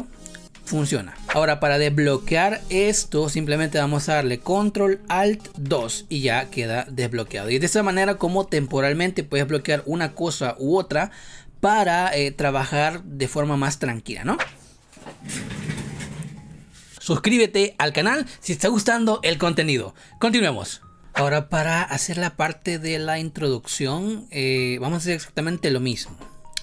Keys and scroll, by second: 5.6 ctrl+alt+2, 7.4 ctrl+z.